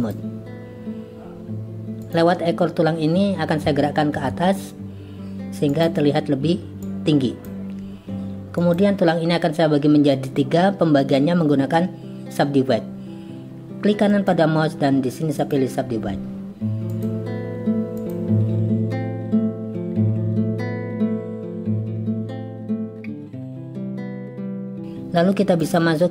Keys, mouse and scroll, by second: 2.0 click, 6.8 click, 8.7 click, 14.1-17.1 drag, 19.1 click, 19.6 g, 20.8 click, 21.2 z, 22.2 g, 23.5 g.